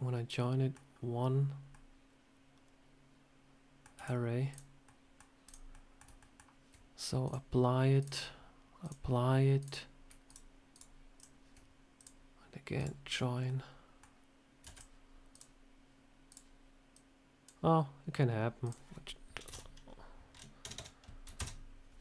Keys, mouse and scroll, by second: 1.6 middle click, 1.6 shift+middle click, 3.8 x, 4.7 middle click, 5.3 click, 5.6 middle click, 6.1 shift+middle click, 7.1 click, 9.1 click, 9.5 click, 10.1 shift+click, 10.2 shift+click, 11.8 click, 13.0 scroll down 2, 13.3 middle click, 14.5 shift+d, 15.2 click, 16.2 click, 16.8 click, 18.5 click, 20.6 BackSpace.